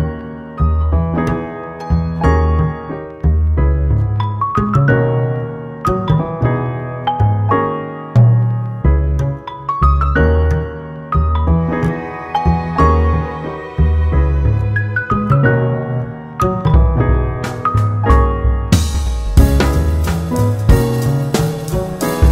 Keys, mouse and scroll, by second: 3.9 ctrl+r, 7.6 ctrl+r, 10.6 Tab, 12.9-15.3 middle drag, 15.3 click, 16.8 click, 17.1 scroll down 5, 18.9-19.9 drag, 19.9-21.1 middle drag, 21.1 g.